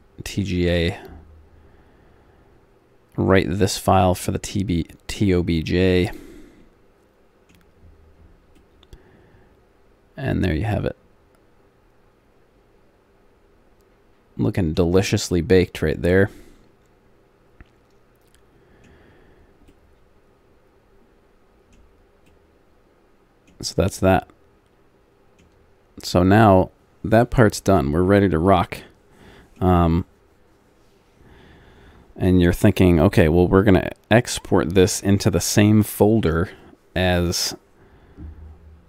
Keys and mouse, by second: 6.2-7.9 middle drag, 8.0 middle click, 8.9 middle click, 9.3 middle click, 9.6 middle click, 15.5 middle click, 18.7-19.7 middle drag, 21.1 middle click, 21.6 middle click, 27.5-29.2 middle drag, 29.4-38.8 middle drag.